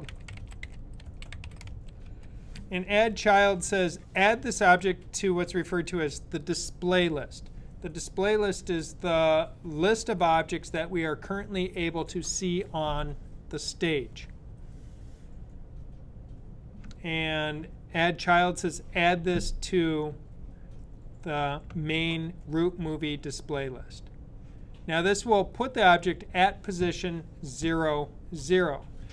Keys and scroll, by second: 0.0-2.5 typing.